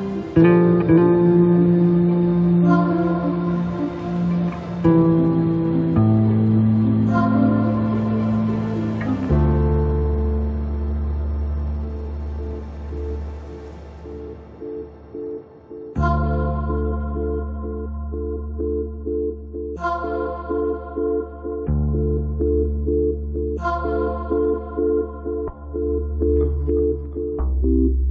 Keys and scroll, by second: 15.3 c, 15.6 e.